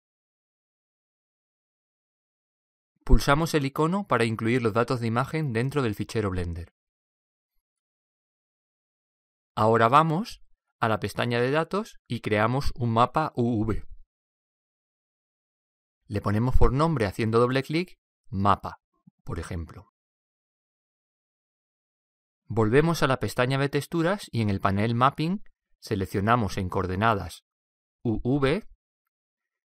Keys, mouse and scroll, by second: 0.0 click, 6.0-7.6 drag, 11.9-16.6 drag, 17.8 click, 24.2-26.9 drag, 27.8-29.6 drag.